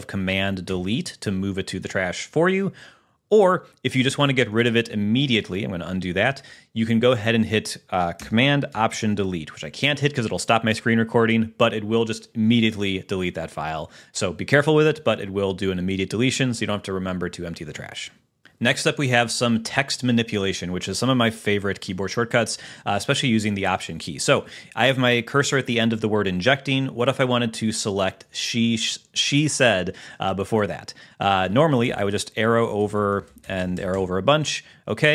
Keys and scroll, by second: 1.0 super+BackSpace, 4.9 super+z, 31.8 Left.